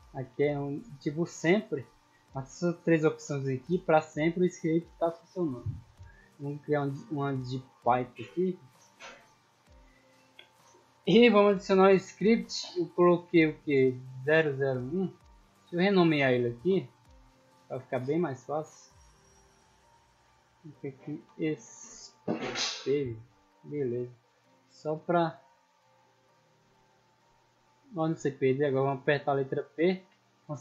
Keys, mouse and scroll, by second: 0.1 click, 1.0 click, 3.5 click, 4.2 click, 5.5 click, 7.0 click, 8.3-9.4 drag, 10.3-11.0 middle drag, 12.2 click, 14.3 click, 15.6 click, 16.7 click, 17.7 click, 18.6 click, 19.2 click, 20.3 click, 20.8-22.0 typing, 22.6 click, 24.8 right click, 25.2 click, 25.5 click, 26.9 right click, 27.3 click, 27.7 click, 28.7-29.1 scroll down 2, 29.1 p.